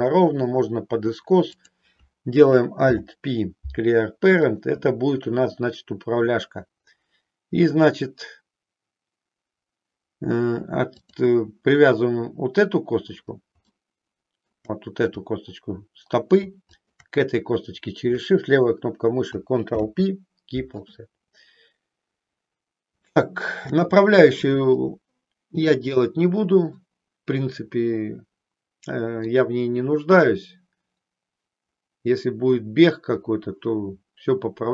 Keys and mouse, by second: 1.7 click, 2.8 alt+p, 10.9 click, 13.8 shift+middle click, 16.7 shift+click, 19.7 ctrl+p, 23.2 shift+middle click, 26.8-29.4 middle drag.